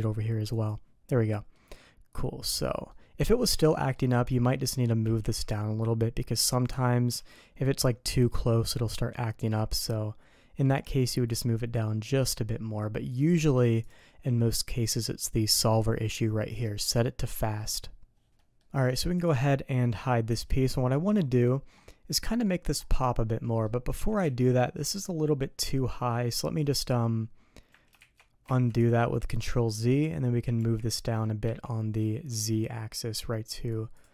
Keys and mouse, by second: 0.5 click, 1.3 middle click, 2.5 click, 2.9 middle click, 3.7 middle click, 4.2 middle click, 5.0 g, 13.8 click, 18.3 ctrl+s, 18.4 drag, 19.2 click, 19.8 click, 20.3 h, 20.7 click, 21.8 click, 23.4 click, 24.2 ctrl+z, 28.5 ctrl+shift+z, 30.6 g.